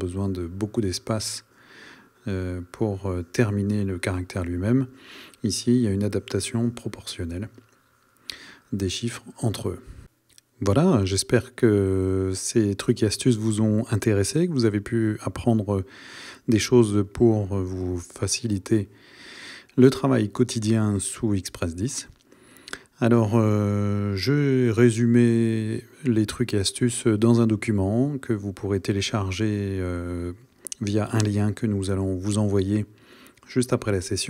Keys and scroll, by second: 22.6 Right, 27.2 Right, 27.9 Right, 28.7 Right, 29.6 Right, 30.5 Right, 31.5 Right.